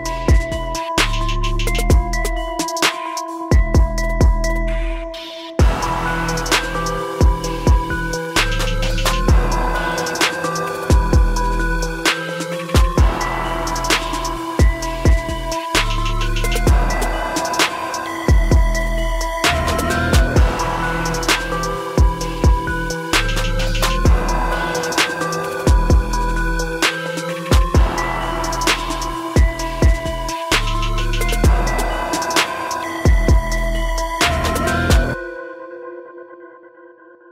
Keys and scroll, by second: 10.2 ctrl+shift+i, 11.0 ctrl+shift+i, 33.4 ctrl+shift+i.